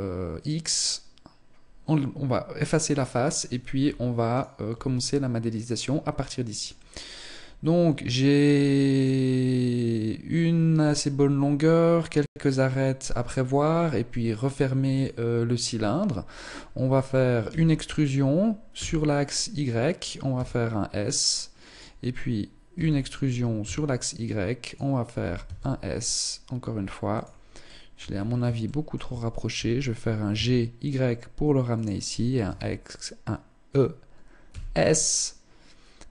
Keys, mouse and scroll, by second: 3.9 alt+right click, 4.5 middle click, 16.9 e, 19.5 click, 19.7 s, 22.2 e, 24.9 s, 27.1 shift+middle click, 27.5-27.9 scroll up 3, 28.1 shift+middle click, 28.9 g, 31.9 e.